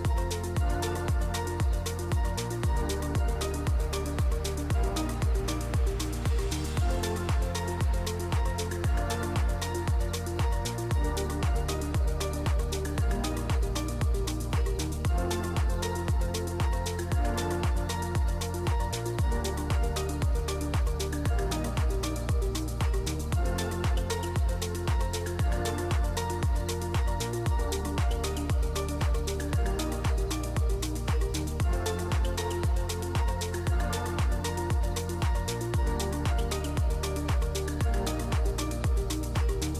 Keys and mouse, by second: 0.9 z, 1.4 click, 2.2 Tab, 2.5 drag, 3.2 click, 3.9 shift+drag, 4.6 click, 4.9 shift+click, 5.5 shift+middle drag, 7.4 ctrl+p, 8.8 click, 9.4 KP_1, 10.0 s, 10.8 ctrl+s, 10.8 ctrl+a, 11.1 ctrl+a, 12.1 g, 13.9 drag, 14.5 drag, 15.3-16.2 middle drag, 16.6 middle drag, 17.2 middle click, 18.6 shift+click, 19.4 click, 19.9 ctrl+2, 20.3 click, 20.7 ctrl+2, 21.3 shift+click, 21.7-22.8 drag, 22.9 shift+click, 23.3 drag, 23.8 shift+click, 24.2-24.6 drag, 24.8 shift+drag, 25.2-26.2 drag, 26.5 Tab, 27.2 ctrl+r, 29.9 s, 31.8 Tab, 32.1-32.7 drag, 33.2 /, 33.6 drag, 34.0 Tab, 34.7 ctrl+r, 38.4 click, 39.5 ctrl+r.